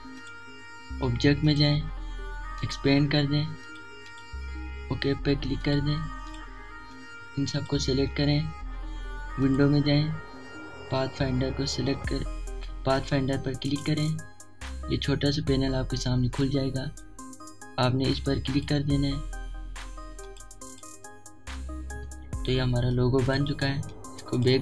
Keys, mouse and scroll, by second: 12.6-17.4 drag, 14.6 typing, 17.4 click, 20.7 alt+scroll down 1, 21.9-24.6 drag.